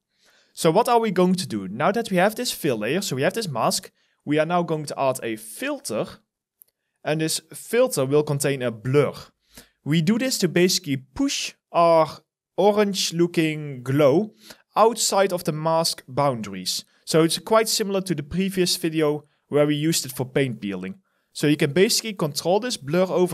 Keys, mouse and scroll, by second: 0.0 alt+right click, 10.4 alt+middle click, 10.8 alt+right click.